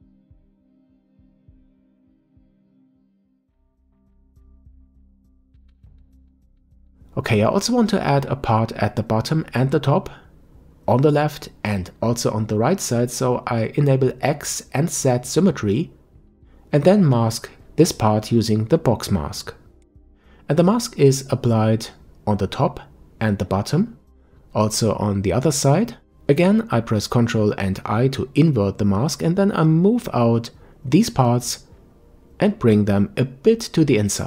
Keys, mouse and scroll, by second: 0.6-3.8 drag, 5.2-8.5 middle drag, 8.5 click, 9.2-10.4 middle drag, 10.4 KP_5, 12.4 click, 14.1 click, 14.8-17.5 scroll up 2, 17.5 click, 22.1-22.7 scroll down 1, 22.7-25.5 middle drag, 25.5 ctrl+i, 27.9-34.2 drag.